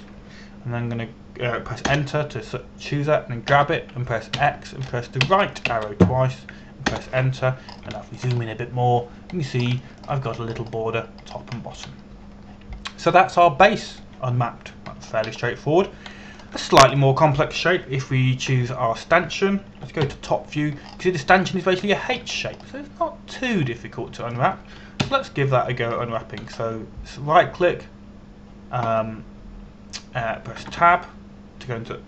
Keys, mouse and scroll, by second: 0.4 Up, 3.5 Return, 5.1 g, 6.0 x, 6.9 Right, 8.5 Return, 9.3 scroll up 1, 9.6 shift+middle click, 10.1-11.1 scroll up 1, 11.1 scroll down 1, 11.4 shift+middle click, 12.1-12.8 scroll up 1, 12.8-15.6 scroll down 1, 15.6 click, 16.6 scroll down 1, 17.8 shift+middle click, 18.7 middle click, 20.3 Tab, 20.7 right click, 21.7 KP_7, 22.4 scroll up 1, 23.5 shift+middle click, 24.1 scroll up 1, 25.1 middle click, 26.6 ctrl+KP_1, 27.7-28.8 scroll down 1.